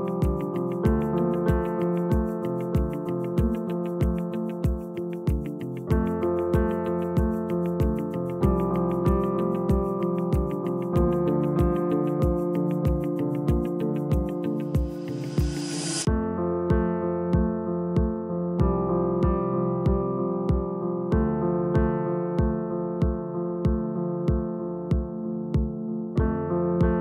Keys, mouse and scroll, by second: 1.1-2.5 drag, 2.5 e, 5.0 g, 6.4 s, 7.9 e, 10.2 click, 11.2 click, 11.9-12.7 scroll up 1, 12.7 s, 15.9 e, 18.2 m, 21.2 click, 23.2 g, 26.6 click.